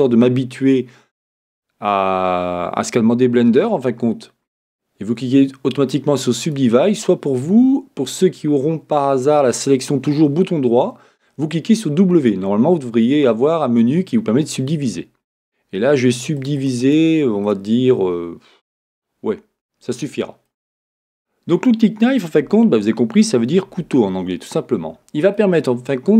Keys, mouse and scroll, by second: 16.1-19.2 drag, 23.5-26.1 middle drag, 23.7 a.